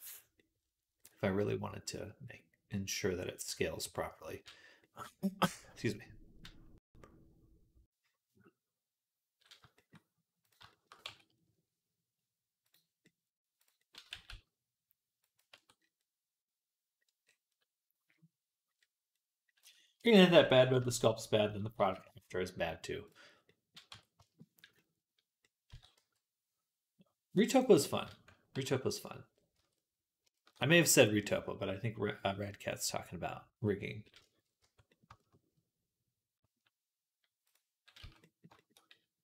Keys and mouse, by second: 0.0 middle click, 2.4-10.2 middle drag, 10.2 click, 10.6-12.5 shift+middle drag, 10.9 Tab, 12.5-13.6 drag, 13.9-15.0 middle drag, 13.9 g, 15.0-16.6 drag, 15.4 Tab, 16.6-20.3 middle drag, 20.4-29.1 shift+middle drag, 23.7 Tab, 25.5 s, 28.4 ctrl+z, 29.1 click, 29.4 Tab, 30.3 shift+middle click, 30.6 middle click, 33.6 middle click, 34.1-37.3 shift+middle drag, 34.4 Tab, 37.3-38.5 drag, 37.8 z, 38.5 click.